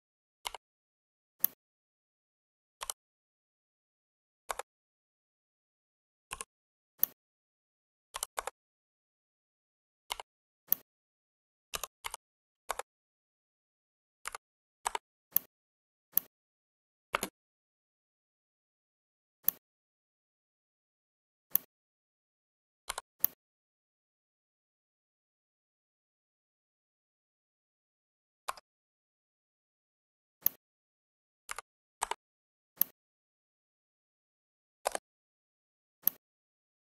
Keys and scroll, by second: 2.9 6, 4.4 Return, 8.2 Return, 11.7 1, 12.0 5, 12.5 Return, 17.1 space, 28.5 Escape.